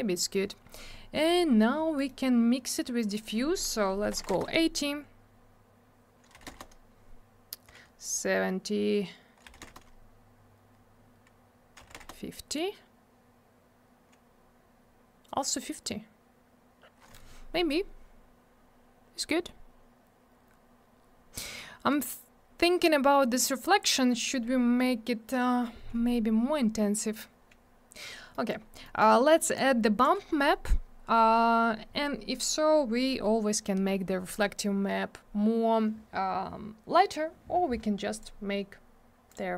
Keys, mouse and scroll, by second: 0.1 middle click, 0.3 middle click, 0.4 scroll down 1, 1.1 middle click, 1.3 middle click, 1.9 middle click, 2.0 middle click, 3.0 click, 3.0 click, 3.1 click, 3.2 click, 4.1 8, 4.2 Return, 6.3 7, 6.4 Return, 9.4 6, 9.6 Return, 11.5-12.4 typing, 18.0-18.6 scroll up 1, 18.6-19.4 scroll down 1, 19.4-20.5 scroll up 1, 20.5-22.1 scroll down 1, 28.3 middle click, 28.4 middle click, 28.5 scroll down 1, 28.8 middle click, 28.9 middle click, 29.5 click, 38.1 click, 38.1 click, 39.2 click, 39.3 click.